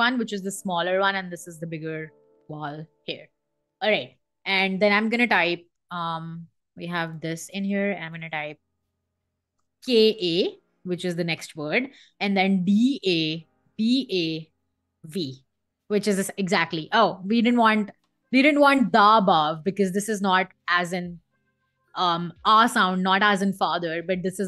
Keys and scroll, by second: 5.3 Down, 5.8 Escape, 9.2 space, 9.5 k, 9.8 a, 11.0 space, 12.3 d, 12.6 a, 13.3 b, 13.7 a, 14.7 v, 15.7 Escape, 17.0 Escape, 18.7 BackSpace, 20.5 Escape, 21.3 Escape.